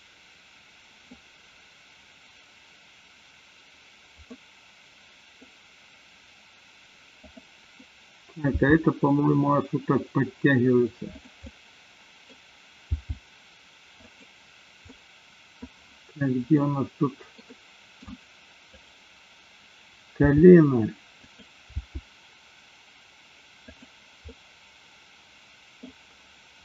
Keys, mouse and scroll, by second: 4.3-5.4 middle drag, 7.2-7.9 drag, 8.6 g, 11.4-12.4 middle drag, 12.8 g, 14.9 middle click, 15.6 scroll down 1, 16.6 scroll up 1, 16.7-18.4 middle drag, 20.4 g, 21.3 click, 21.7 g, 24.3-25.8 middle drag.